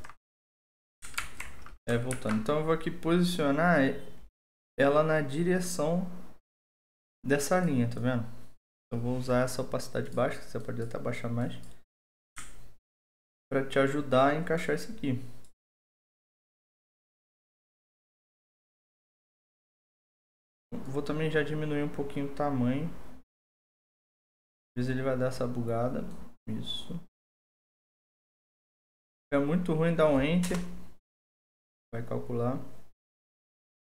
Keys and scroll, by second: 1.2 alt+2, 2.1 ctrl+t, 30.5 Return.